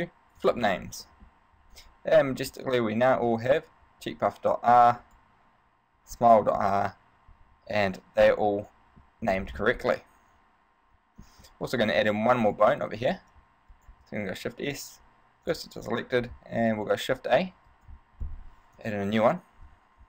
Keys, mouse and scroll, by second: 1.3 middle click, 2.3 right click, 5.2 right click, 6.6 middle click, 8.5 middle click, 9.4 a, 9.7-10.2 scroll down 3, 10.0 middle click, 12.0 right click, 12.6 shift+right click, 13.2 right click, 13.9 shift+right click, 14.6 shift+s, 16.8 shift+a, 17.9 right click, 19.0 KP_3.